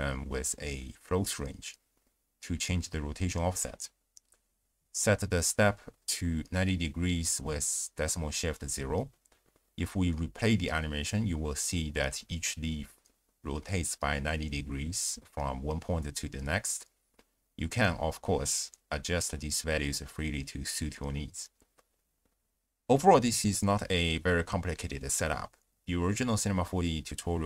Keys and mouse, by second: 0.7 drag, 1.3 ctrl+a, 3.8-4.9 drag, 5.5 click, 6.0 click, 7.4-7.8 drag, 7.9 click, 8.3 shift+space, 9.8-10.5 drag, 10.6 space, 12.0 click, 13.7 drag, 14.2 shift+space, 15.6 click, 17.2 space, 18.1-18.6 drag, 19.0 click.